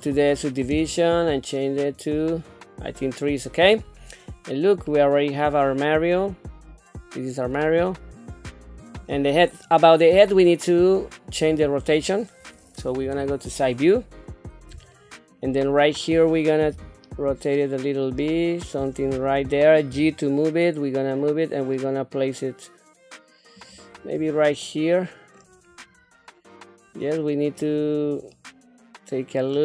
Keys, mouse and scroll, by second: 1.8 click, 2.3 click, 3.2 middle click, 3.8 scroll down 2, 4.2 middle click, 4.9 scroll down 1, 5.3-7.1 middle drag, 7.5-9.0 middle drag, 9.5 middle click, 11.2 click, 11.9 click, 13.0 KP_3, 13.8 scroll up 2, 14.9 shift+middle click, 16.7 r, 19.9 g, 24.1 scroll down 1, 24.6 middle click, 25.7 scroll down 1, 26.1-27.5 middle drag, 27.7-28.1 scroll down 2, 28.3-29.5 middle drag.